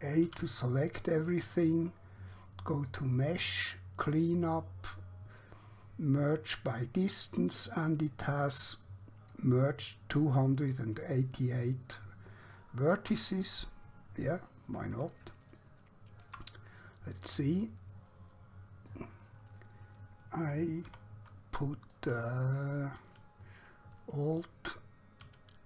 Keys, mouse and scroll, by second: 0.3 a, 2.9 click, 6.7 click, 14.8-15.3 scroll down 1, 15.7 shift+middle click, 17.1 middle click, 18.7-20.7 scroll up 1, 21.0 2, 21.9 click, 24.3 alt+click.